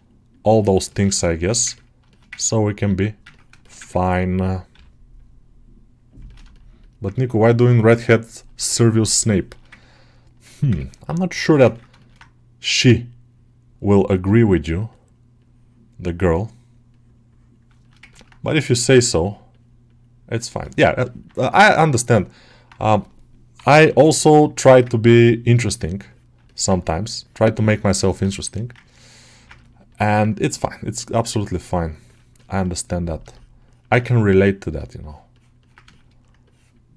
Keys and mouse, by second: 0.7 ctrl+middle click, 1.1 alt+shift+middle click, 1.6 ctrl+middle click, 2.0 alt+shift+middle click, 2.2 ctrl+alt+middle click, 2.7 alt+q, 3.2 ctrl+middle click, 3.5 alt+shift+middle click, 3.7 ctrl+middle click, 4.6 g, 6.1 ctrl+middle click, 6.4 alt+shift+middle click, 6.7 middle click, 7.0 ctrl+middle click, 7.6 middle click, 7.9 alt+shift+middle click, 9.2 shift+middle click, 9.6 ctrl+middle click, 10.3 alt+q, 10.6 ctrl+middle click, 11.3 g, 11.6 ctrl+alt+middle click, 11.9 shift+middle click, 12.8 click, 15.2-17.7 drag, 17.7 alt+shift+middle click, 17.9 ctrl+middle click, 18.9-20.6 right drag, 20.6 shift+middle click, 20.9 alt+middle click, 21.6 middle click, 22.0 shift+middle click, 22.3 middle click, 23.4 [, 23.6 [, 24.5 middle click, 25.5 ctrl+middle click, 25.9 ctrl+middle click, 27.1-28.2 ctrl+drag, 28.2 shift+middle click, 28.4 middle click, 29.1 ctrl+click, 29.5 shift+middle click, 29.8 middle click, 32.2 middle click, 32.5 alt+shift+middle click, 32.8 middle click, 33.2 alt+shift+middle click, 33.5 shift+middle click, 34.6-35.8 ctrl+drag, 35.8 shift+middle click, 36.3-36.9 drag.